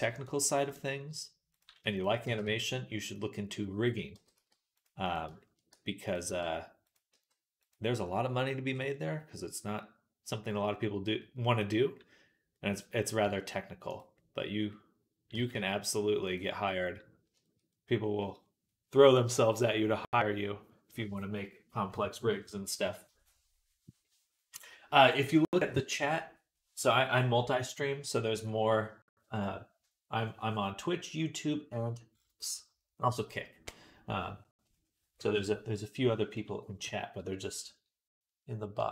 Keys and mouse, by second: 2.1 g, 4.0 g, 5.5 g, 6.1 r, 7.0 g, 8.5-10.0 middle drag, 10.0-38.9 drag, 13.1 s, 15.2 g.